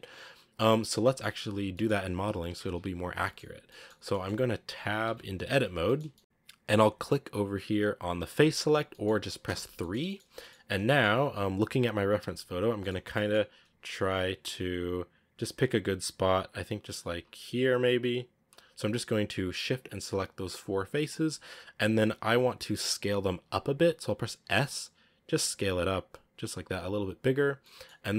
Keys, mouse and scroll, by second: 0.0-1.2 shift+middle drag, 1.2-1.6 scroll up 1, 1.6 middle click, 2.3 KP_1, 3.1 shift+middle click, 3.8 scroll down 2, 3.9 middle click, 4.6-4.9 scroll down 1, 4.9 Tab, 5.7-8.2 shift+middle drag, 8.2 click, 8.8-10.4 middle drag, 10.4-10.7 scroll up 1, 10.7-11.8 shift+middle drag, 11.8-12.1 scroll down 1, 12.1-12.7 scroll up 1, 12.7-16.8 middle drag, 16.8 right click, 17.3 shift+right click, 17.7 shift+right click, 18.3 shift+right click, 19.2-21.1 scroll up 1, 21.1 scroll up 1, 21.3-23.5 scroll down 1, 24.3 s, 27.5 middle click.